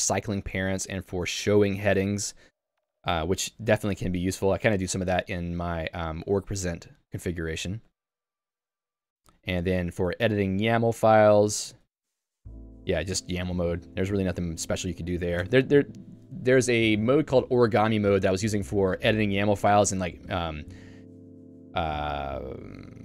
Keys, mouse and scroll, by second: 3.0 k, 3.8 j, 5.3 k, 10.8 Home, 11.7 k, 11.9 Tab, 12.7 ctrl+d, 13.3 k, 15.4 Tab.